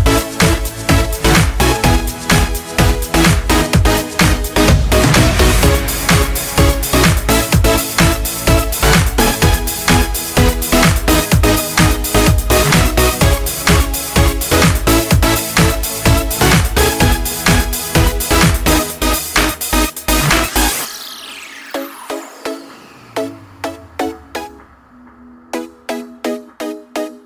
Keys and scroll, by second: 16.5 ctrl+z.